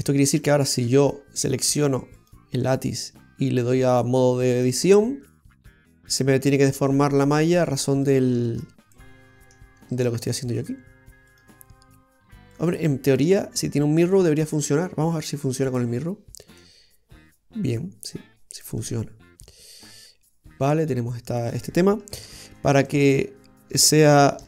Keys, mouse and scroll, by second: 0.9 Tab, 1.5 right click, 2.0 Tab, 2.2 right click, 2.9 middle click, 4.0 click, 5.1 scroll up 2, 5.5 middle click, 8.0 right click, 8.5 shift+right click, 9.0 middle click, 10.6 shift+right click, 11.4 shift+right click, 12.6 shift+right click, 13.1 shift+right click, 13.4 middle click, 15.7 click, 16.6 click, 19.0 middle click, 22.2 ctrl+z, 22.7-23.4 scroll down 2, 22.9 middle click, 23.9 shift+right click, 24.3 shift+right click.